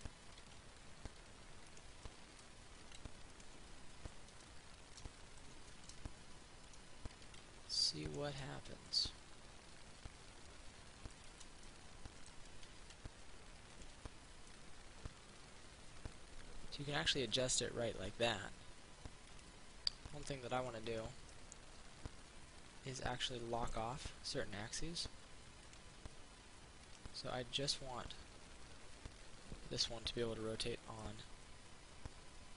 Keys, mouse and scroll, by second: 1.9 click, 2.3 middle click, 3.1 ctrl+r, 3.5 click, 4.3 click, 4.7 middle click, 5.9 Tab, 7.5 ctrl+r, 8.3 click, 8.6 click, 9.3-11.3 middle drag, 11.3 Tab, 11.9 middle click, 13.1 ctrl+r, 13.9 click, 14.1 Tab, 14.7-18.2 middle drag, 19.5 click, 20.4 right click, 20.8 click, 21.5-24.3 middle drag, 25.9 click, 28.0-31.2 middle drag.